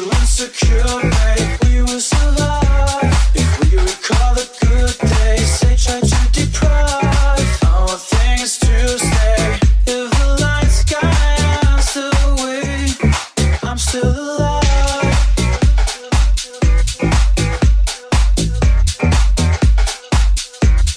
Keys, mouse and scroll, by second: 1.1-20.9 middle drag, 1.1 r, 5.4 g, 16.8 g, 17.9 s, 17.9 s, 19.8 KP_1.